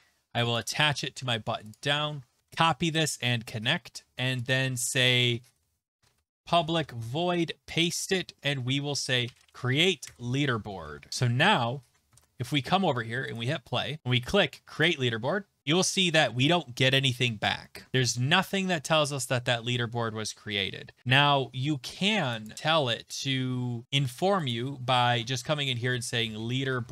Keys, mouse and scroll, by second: 0.5 click, 0.7 click, 1.7 click, 1.8 ctrl+a, 2.4 ctrl+c, 2.4 click, 3.0 click, 4.5 click, 5.2 Return, 5.4 Return, 5.5-11.3 typing, 7.9 click, 10.1 Tab, 11.1 click, 12.0 scroll, 12.1 alt+Tab, 13.3 click, 14.0 click, 14.8 click, 17.9-18.5 scroll, 22.5 click, 23.1 click, 24.5 click, 25.1 Tab, 25.4 Tab, 25.9-26.9 typing.